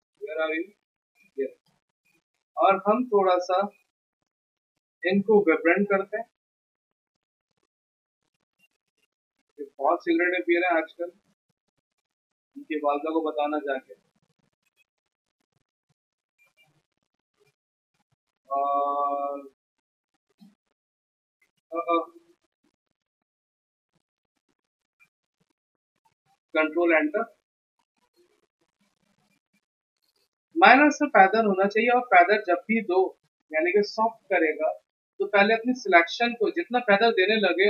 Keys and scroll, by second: 21.7 ctrl+z, 26.8 ctrl+Return, 35.5 Escape.